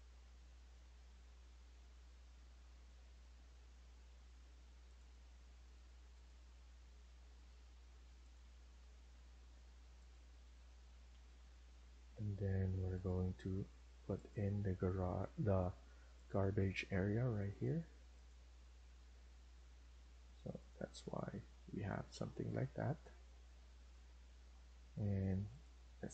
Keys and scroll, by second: 10.2 Escape, 20.6 Escape.